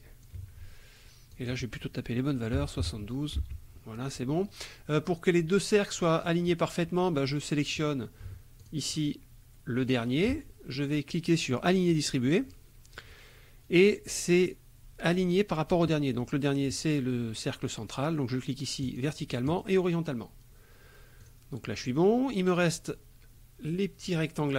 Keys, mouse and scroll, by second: 1.3 click, 2.6 KP_7, 2.8 KP_2, 3.4 Tab, 8.6 shift+click, 11.9 click, 18.8 click, 19.5 click, 21.2 click, 21.9 click.